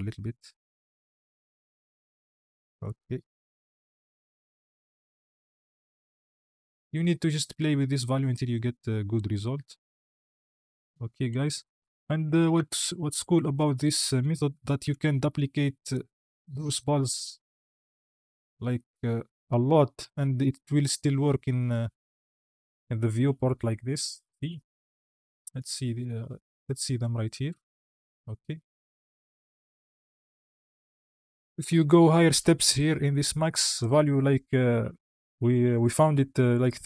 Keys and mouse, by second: 5.4 shift+middle click, 6.0 shift+click, 11.7 KP_1, 12.4 space, 13.2 drag, 14.2 Tab, 14.7 a, 15.4 shift+d, 16.4 shift+d, 16.6 click, 17.4 shift+d, 17.7 click, 18.7 shift+d, 19.1 click, 19.5 Tab, 20.2 space, 25.5 click, 27.8-28.2 drag, 29.0 click, 31.4 space, 33.6-36.8 drag.